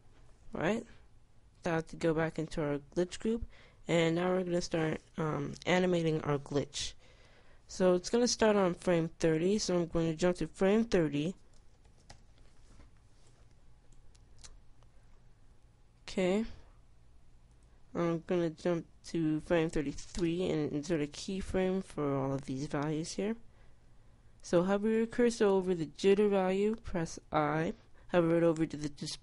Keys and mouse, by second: 1.8 Tab, 12.4 click, 16.4 click, 20.4 KP_3.